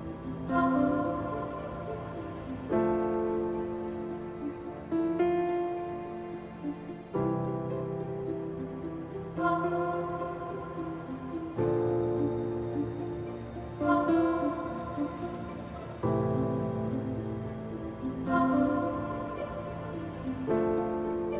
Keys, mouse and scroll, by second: 20.4 click.